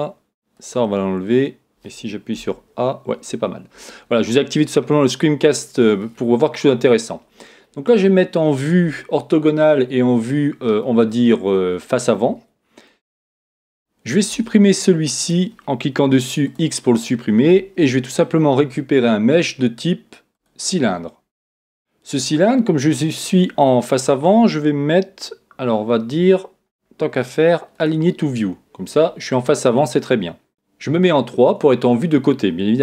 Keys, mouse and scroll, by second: 2.5 a, 4.7-6.7 middle drag, 6.7 KP_1, 8.8 KP_5, 13.6 Tab, 14.3 Tab, 16.0-17.6 right drag, 16.0 x, 17.8 shift+a, 26.6-27.7 middle drag, 27.7 click.